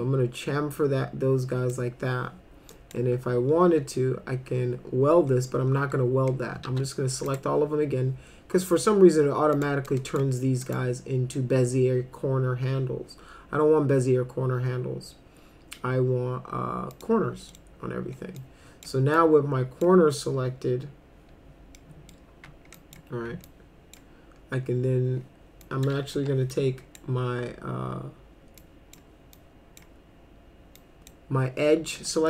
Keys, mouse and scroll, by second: 2.7 click, 6.7 ctrl+a, 7.3 right click, 9.6 click, 9.9 click, 10.6 right click, 16.9 click, 17.5 middle click, 18.4-18.8 drag, 19.2 click, 21.8 middle click, 22.8 click, 23.5 click, 25.6 click, 26.2 2, 26.5-27.0 drag, 28.6-29.0 drag, 29.3-29.8 drag, 30.8 drag, 32.1 middle click.